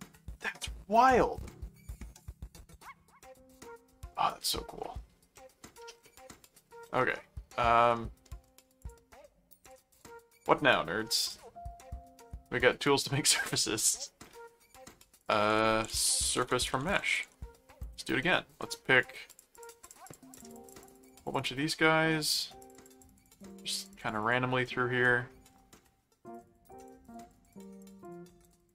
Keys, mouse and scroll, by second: 0.6-3.9 middle drag, 4.5 middle click, 5.3 middle click, 6.0 middle click, 6.8 middle click, 7.9 middle click, 8.8 click, 9.6 click, 10.5 middle click, 11.2 click, 13.1 middle click, 13.8 middle click, 15.2 click, 15.3-17.7 typing, 17.8 Return, 19.3-21.9 drag, 21.7 middle click, 22.3-24.7 drag, 24.6 middle click, 25.8 middle click, 26.3-28.7 drag.